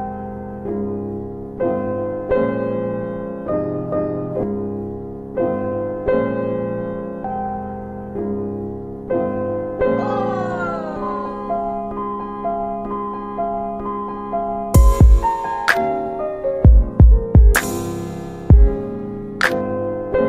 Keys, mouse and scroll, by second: 0.2 alt+middle click, 0.9 middle click, 1.8 click, 3.5 ctrl+shift+r, 6.7 right click, 9.4 alt+w, 10.5 alt+middle click, 10.6 alt+w, 11.7 alt+w, 12.9 alt+middle click, 14.1 ctrl+click, 18.1 alt+middle click, 19.7 click.